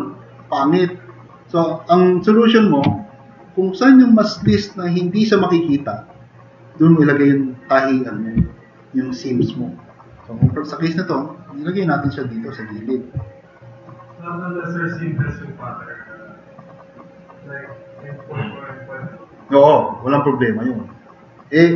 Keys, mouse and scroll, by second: 2.2 click, 3.4-3.8 drag, 10.5-11.1 drag, 11.7 click, 13.4 click, 17.9 click.